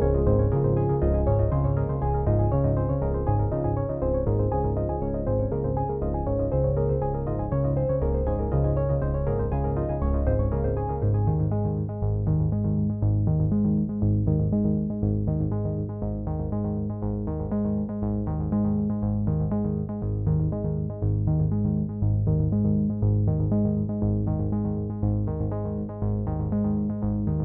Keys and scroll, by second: 6.3 ctrl+t.